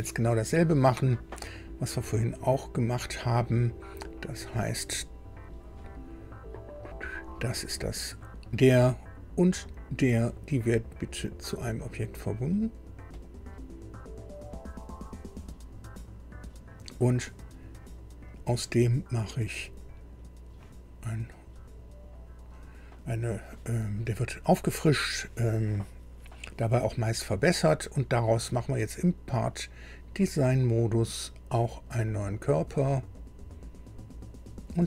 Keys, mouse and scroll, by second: 6.8 click, 9.6 ctrl+click, 13.1 click, 17.3 scroll down 2, 18.2 click, 19.5 click, 20.9 scroll down 2, 22.5 click, 28.8 click, 29.8 click, 30.5 scroll down 2, 31.7 click, 33.1 click, 34.5 scroll down 2.